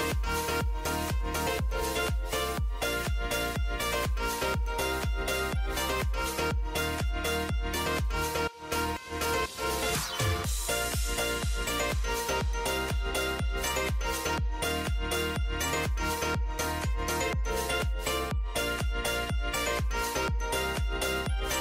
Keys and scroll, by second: 5.2 j.